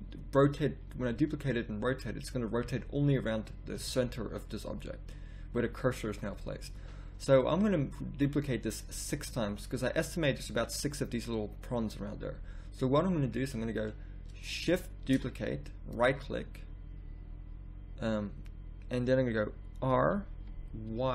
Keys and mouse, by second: 2.6 z, 3.7 z, 6.7 z, 11.4 middle click, 12.2 middle click, 15.0 shift+d, 19.9 r.